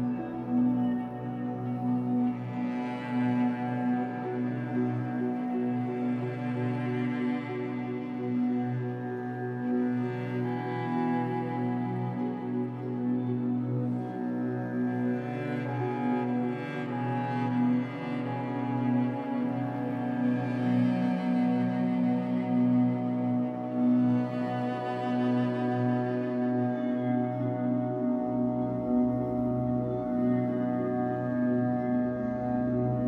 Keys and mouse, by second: 2.6 click, 3.6-4.3 middle drag, 5.0 click, 5.4 click, 5.6 click, 7.6-10.2 typing, 11.5 click, 11.5 typing, 13.8 click, 14.8 click, 16.6 ctrl+alt+click, 17.6 7, 18.5 alt+shift+click, 19.0 ctrl+alt+click, 20.6-23.8 ctrl+alt+drag, 24.4 alt+click, 24.4 typing, 26.5 click, 26.8 click, 27.4 click, 29.0-31.9 typing.